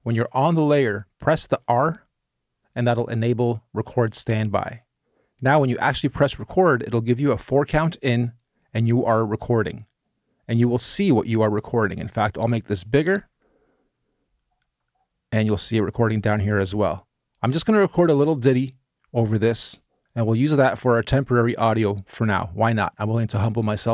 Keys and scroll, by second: 13.2 e.